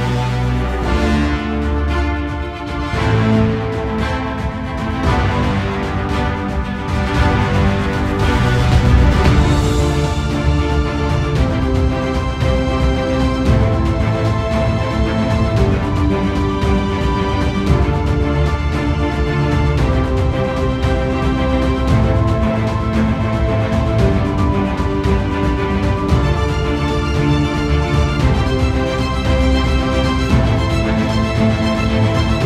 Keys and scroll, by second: 1.0 space.